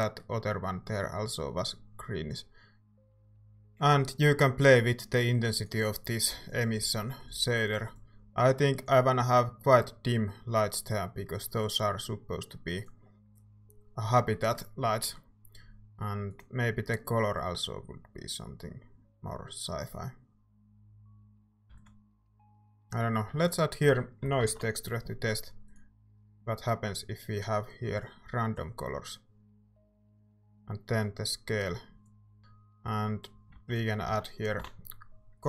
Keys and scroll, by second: 21.8 ctrl+s, 23.3-25.1 typing, 33.5-35.1 typing.